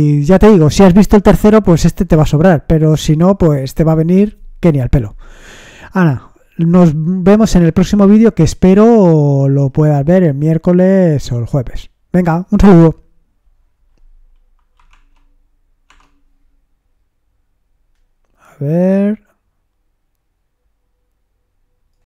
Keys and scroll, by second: 14.9 alt+Tab, 15.9 alt+Tab.